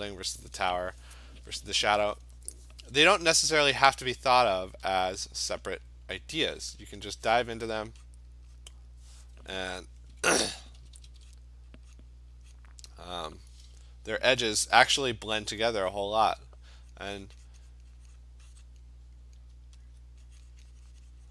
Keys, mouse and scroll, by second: 5.0 click, 5.7 click, 6.2 click, 7.1 click, 7.9 click, 8.1 click, 8.4 click, 8.6 click, 10.2-11.2 typing, 11.4 click, 12.0 click, 12.6 click, 13.2 click, 13.4 click, 15.4 alt+click, 16.0 click, 16.3 click, 16.9 click, 17.1 click, 17.4 click, 17.5 click, 17.8 click, 18.2 click, 18.4 alt+click, 18.7 click, 19.9 alt+click, 20.6 click, 21.2 click.